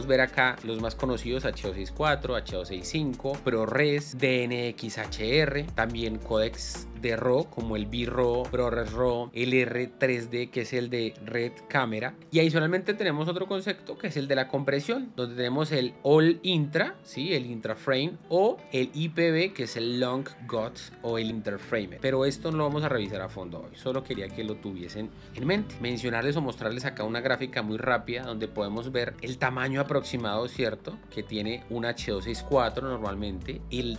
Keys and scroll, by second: 26.7 space.